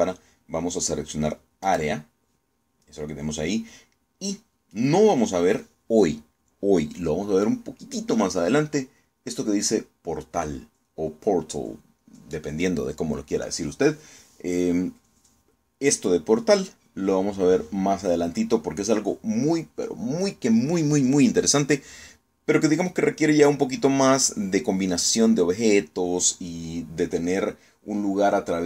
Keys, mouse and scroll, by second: 2.3 click.